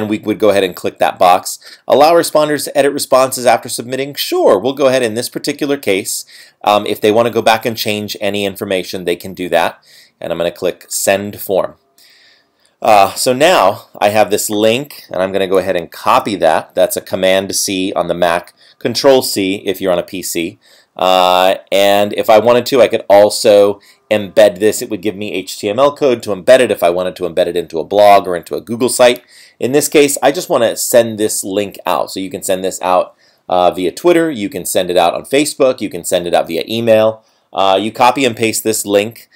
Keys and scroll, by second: 16.0 super+c.